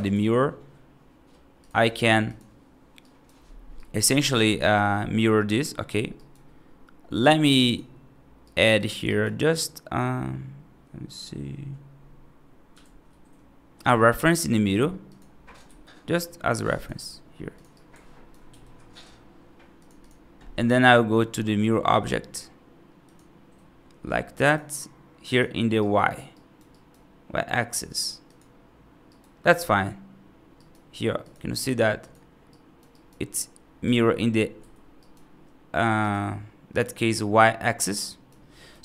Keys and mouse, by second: 2.9 right drag, 3.6 right drag, 4.4 right click, 6.0 right click, 7.1 click, 7.5 click, 8.3 right click, 8.6 click, 8.9 right click, 12.7 shift+a, 15.5 s, 16.8 g, 17.6-18.1 alt+right drag, 18.3 g, 19.8 click, 24.3 click, 25.1 click, 25.6-26.0 right drag, 26.2 right drag, 26.6 right drag, 29.0 right click, 30.4 right click, 31.4 click, 31.9 click, 32.4-32.7 right drag, 32.8 right click, 32.8 right drag, 33.7 x, 34.8 right drag, 35.8 click, 37.8-38.1 right drag, 38.6 F3.